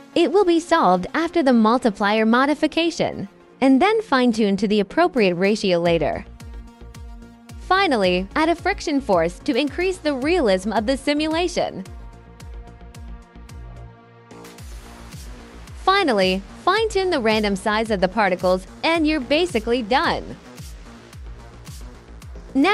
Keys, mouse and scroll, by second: 4.3 click, 4.9 click, 5.2 5, 5.3 click, 8.0 alt+click, 9.4-12.0 drag, 15.1 click, 15.8 click, 16.5 2, 16.9 click, 20.4-20.8 drag, 20.9 alt+click, 21.8 alt+click, 22.1 alt+click.